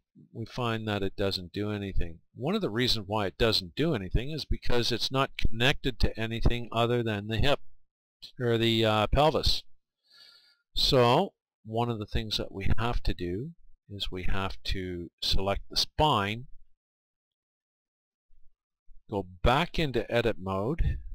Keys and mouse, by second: 1.9 r, 2.9-4.6 right drag, 9.2-13.5 right drag, 15.9-17.8 right drag, 20.8 Tab.